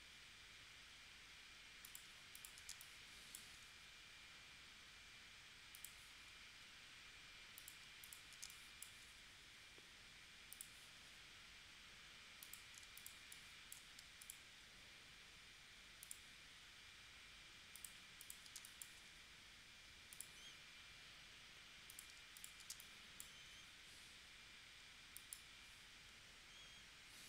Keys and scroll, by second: 2.7 space, 8.5 space, 12.9 space, 18.6 space, 22.7 space.